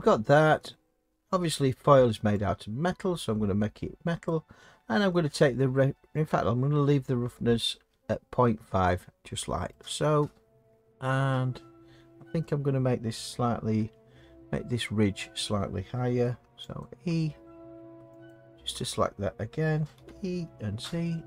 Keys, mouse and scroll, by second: 0.5-4.2 scroll, 4.2-5.9 scroll, 4.3 click, 10.9 middle click, 11.1 middle click, 11.2 middle click, 11.8 middle click, 11.9 middle click, 13.8 Tab, 16.8 alt+click, 17.0 scroll, 18.3 alt+click, 20.0 e, 20.8 z.